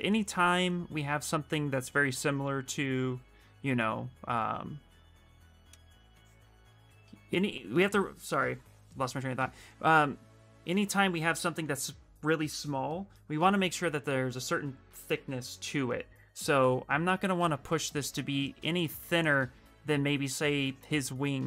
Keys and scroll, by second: 6.4 q.